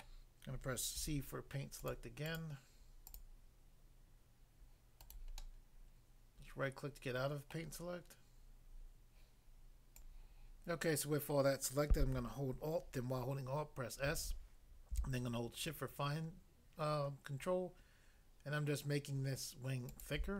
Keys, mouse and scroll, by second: 0.0 middle click, 1.0 c, 1.8 click, 2.3 click, 3.1 double click, 5.0 right click, 5.4 middle click, 7.5 middle click, 9.9 click, 10.1 click, 14.1 alt+s, 19.8 shift+click.